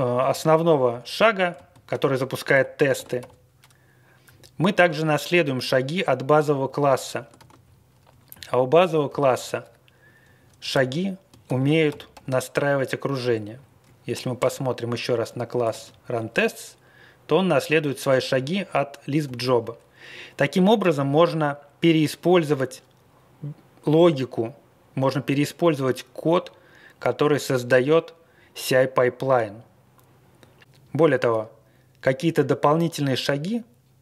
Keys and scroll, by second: 0.1 Down, 0.2 Down, 0.4 Down, 0.8 Left, 1.5 ctrl+space, 2.5 ctrl+g, 2.9 ctrl+c, 3.2 b, 4.2 Up, 4.4 Up, 6.4 Page_Up, 6.6 Up, 7.3 ctrl+e, 7.6 Left, 9.0 alt+., 9.4 Home, 10.2 Up, 10.7 ctrl+x, 11.4 ctrl+g, 11.8 ctrl+x, 12.1 1, 13.2 Down, 13.5 Down, 13.8 Right, 14.0 Right, 14.1 Right, 14.1 Right, 14.1 Right, 14.3 Return, 15.6 ctrl+e, 15.8 Left, 16.1 Left, 16.1 Left, 16.2 Left, 16.2 Left, 19.2 alt+..